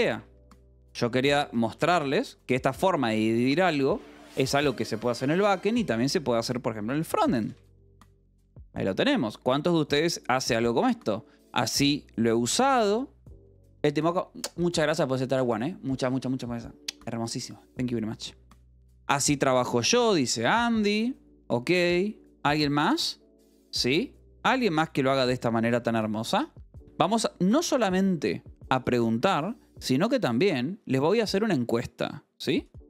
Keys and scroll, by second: 0.0-8.6 typing, 20.3 Escape, 22.3 k, 22.7 j, 23.3 k, 24.0 k, 25.7 k.